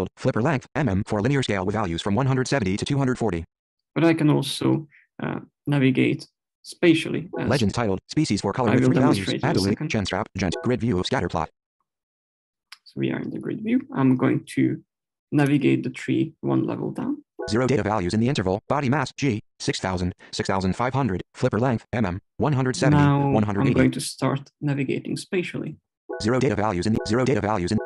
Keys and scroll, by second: 7.1 Right, 10.5 Right, 17.2 Down, 25.8 s, 27.5 d.